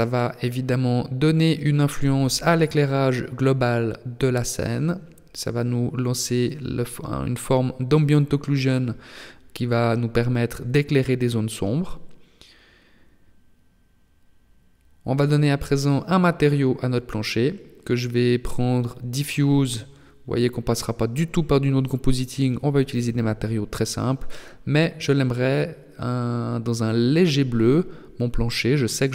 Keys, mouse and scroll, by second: 0.7 click, 7.7 right click, 9.7 click, 11.1 click, 12.4 click, 13.5 o, 15.0 o, 17.1 click.